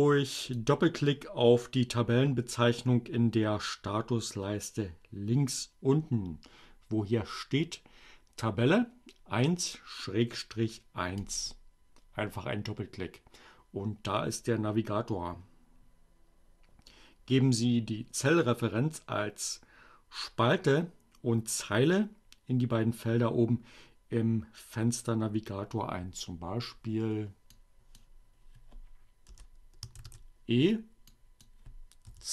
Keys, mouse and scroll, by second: 10.9 click, 27.4 click, 28.8 BackSpace, 29.0 shift+e, 31.0 click, 31.4-32.3 typing.